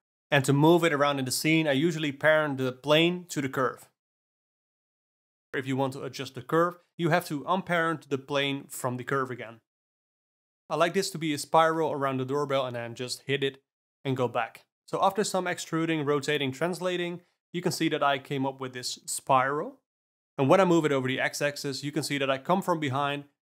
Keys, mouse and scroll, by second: 0.2 click, 0.6 click, 1.8 shift+click, 2.6 ctrl+p, 3.3 alt+a, 3.4 shift+click, 3.5 KP_Divide, 3.9 alt+a, 4.0 click, 4.4 click, 4.5 shift+s, 4.8 click, 5.2 shift+s, 6.2-6.9 middle drag, 6.9 ctrl+p, 8.6 alt+a, 8.8 click, 9.2 g, 11.3 Tab, 11.7 click, 12.0 g, 13.0 alt+middle click, 13.6 g, 14.8 click, 14.9 alt+middle click, 15.0 g, 16.6 click, 16.6 r, 17.6 click, 17.7 alt+middle click, 17.8 r, 19.2 shift+s, 19.3 alt+middle click, 19.7 click, 20.1 g.